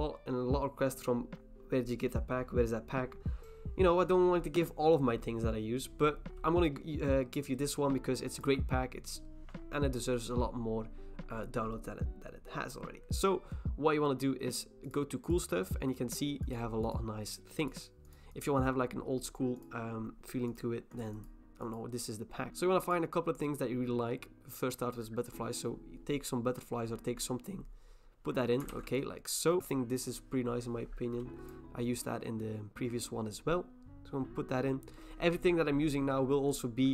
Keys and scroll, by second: 22.5 Escape, 28.7 ctrl+t.